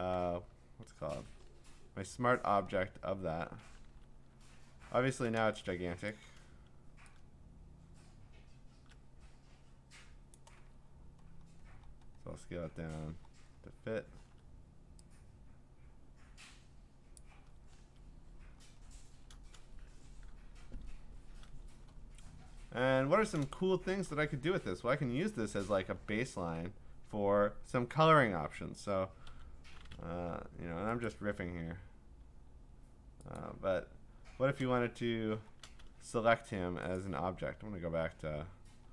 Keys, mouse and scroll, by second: 0.8 ctrl+d, 1.2 ctrl+v, 2.7 scroll, 3.9 ctrl+t, 4.4-5.4 scroll, 6.1 click, 10.3 click, 10.7-13.0 scroll, 13.0-17.1 scroll, 17.1 click, 17.8 Return, 18.6 scroll, 22.2-22.9 scroll, 22.9 scroll down 10, 23.0-23.4 scroll down 2, 24.0 scroll, 24.0 click, 24.3-25.2 alt+scroll down 8, 25.1-25.7 scroll up 8, 26.0 scroll down 1, 27.4 middle click, 27.4 scroll, 31.1 click, 33.4 click, 34.2 Escape, 34.8-35.9 scroll, 37.1 click, 38.8 middle click.